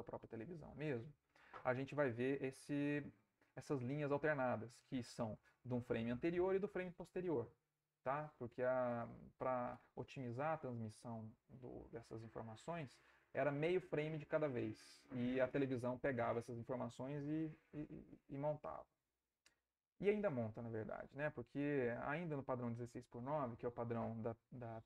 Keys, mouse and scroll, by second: 21.0 Right, 24.1 Right.